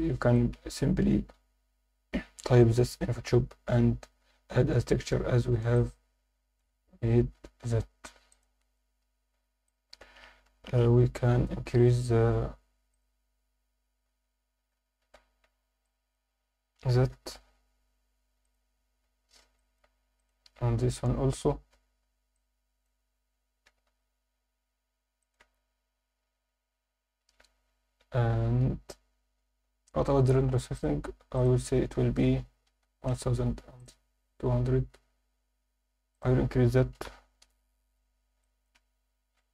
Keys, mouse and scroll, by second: 4.9-5.4 scroll down 3, 5.7-6.2 alt+shift+middle drag, 6.2 alt+shift+click, 7.4 scroll down 1, 8.3 click, 8.9 Tab, 9.7 alt+click, 10.4 KP_7, 11.7 1, 13.2 click, 14.6 a, 15.4 b, 17.1 g, 17.3 y, 18.4 click, 18.7-19.4 scroll down 2, 19.0 Tab, 19.6 alt+shift+middle drag, 20.2 click, 20.6 Tab, 20.8 a, 21.6 alt+a, 22.0 b, 23.7 g, 23.9 y, 25.2 click, 25.4 z, 25.8 Tab, 26.7 alt+a, 30.7 click, 31.4-33.1 drag, 32.8 0, 33.8 click, 36.1-37.5 drag, 38.4-39.5 shift+drag.